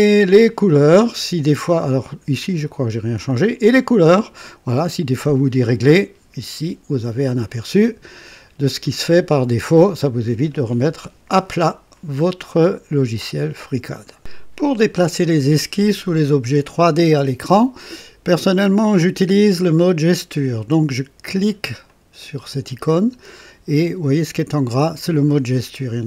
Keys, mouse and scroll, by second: 3.5 click, 13.8 right click, 16.0-18.4 drag, 21.7 click.